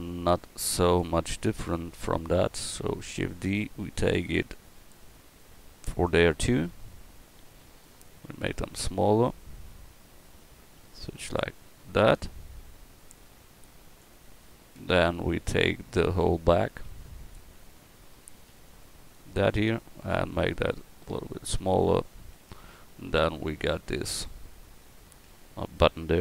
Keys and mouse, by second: 1.3-3.2 drag, 3.2 shift+d, 6.8 KP_1, 7.2-7.9 middle drag, 8.5 s, 9.9-11.8 drag, 12.1-14.0 drag, 14.8 Tab, 15.4 a, 16.8 b, 18.5 b, 22.4 Tab, 25.3 Tab.